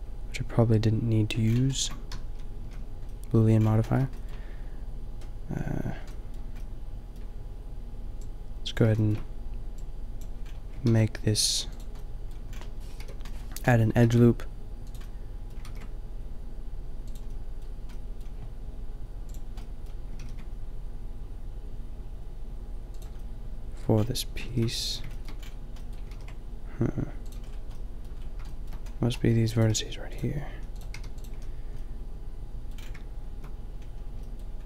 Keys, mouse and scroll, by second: 0.5 middle click, 1.6 middle click, 2.2 a, 2.6 a, 6.5 middle click, 9.1-9.9 drag, 10.3 click, 10.8 ctrl+r, 12.1 middle click, 13.0 KP_5, 14.0 ctrl+r, 15.7 ctrl+r, 20.3 ctrl+r, 24.4 ctrl+r, 26.2 ctrl+r, 29.6 middle click, 29.8 g, 30.6 a, 30.9 g, 31.3 a.